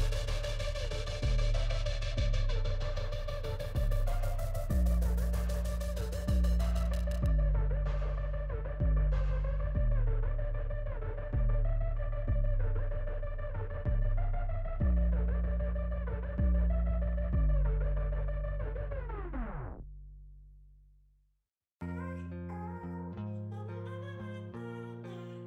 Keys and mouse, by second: 9.2 right click, 9.3 right click, 9.4 right click, 14.5 right click, 24.4 right click.